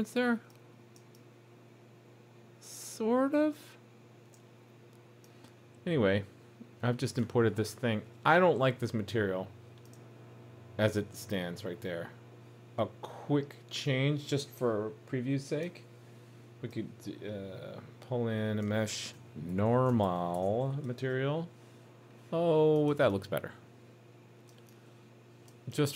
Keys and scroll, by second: 20.9 super+s.